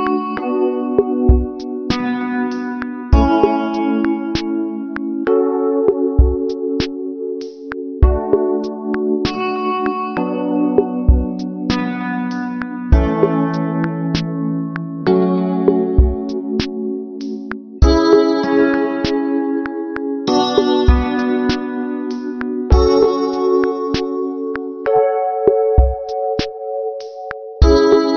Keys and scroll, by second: 19.7 ctrl+-, 28.0 ctrl+alt+shift+n.